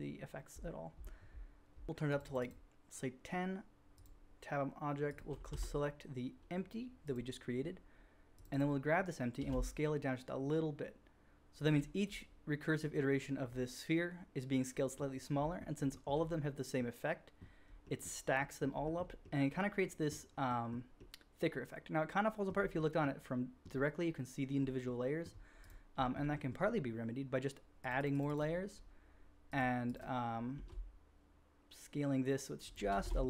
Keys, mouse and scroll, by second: 2.1 middle click, 8.4 click, 8.5 click, 9.4 s, 9.5-11.5 shift+drag, 11.7-14.5 drag, 14.5-15.8 middle drag, 16.1-17.2 middle drag, 17.2-17.6 drag, 17.6-18.3 middle drag, 18.3 drag, 18.3 middle drag, 18.5 drag, 18.9-20.4 shift+middle drag, 20.4-21.1 drag, 21.1 middle click, 21.2 click, 21.4-24.6 middle drag, 24.6-25.6 drag, 25.6 middle click, 25.6 drag, 25.6-26.4 shift+middle drag, 27.8-29.5 middle drag, 29.8 middle click, 30.6 s, 30.7 shift+middle click, 31.0-33.0 shift+drag, 33.0 alt+a, 33.1-33.2 shift+drag.